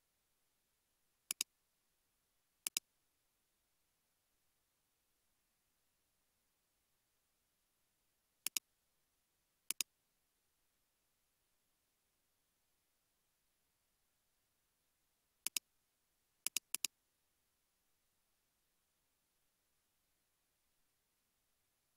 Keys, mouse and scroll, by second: 0.6 typing, 12.6-14.1 typing, 14.1 Return, 16.8 double click, 17.4 space, 21.5 space.